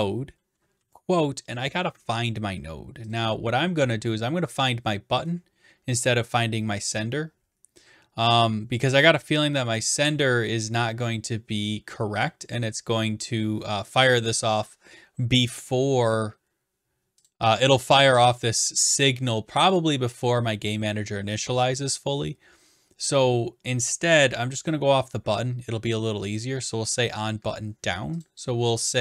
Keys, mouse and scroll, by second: 3.1 click, 17.3 click, 18.4 click, 19.4-20.9 drag, 24.7-25.8 drag.